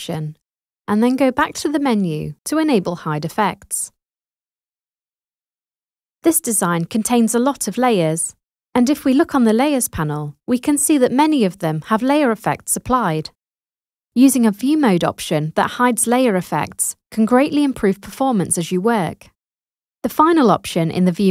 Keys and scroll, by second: 20.1 super+0, 21.2 super+d.